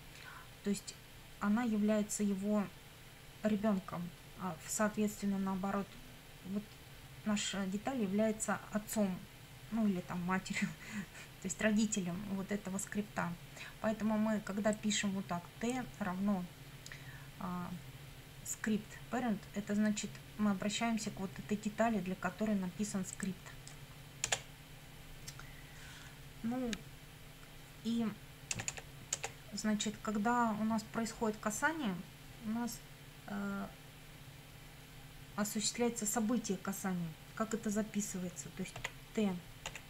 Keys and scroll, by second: 24.3 Return, 28.5 Return, 38.8 t, 39.7 ..